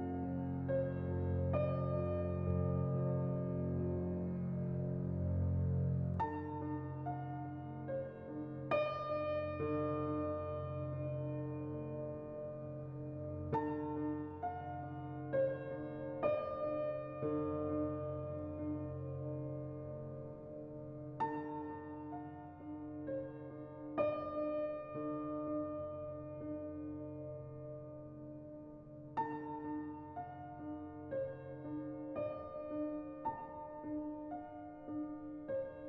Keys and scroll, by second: 13.4 z, 15.7-16.4 typing, 20.2 ctrl+z, 20.2-21.0 typing, 23.1 Return, 29.7-30.5 typing, 33.4-34.1 typing.